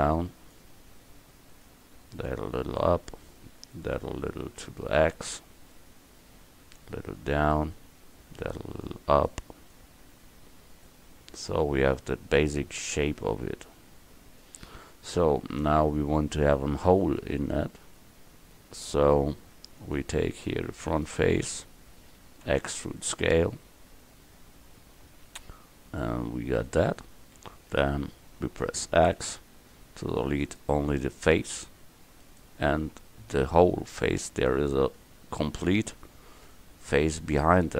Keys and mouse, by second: 2.0 right click, 2.3-5.8 middle drag, 7.2-8.4 drag, 8.4-10.1 middle drag, 10.5 click, 11.4 right click, 19.9-20.9 drag, 20.9-22.5 right drag, 22.5 click, 22.5 e, 29.2 x, 32.3 right click, 35.6 Tab.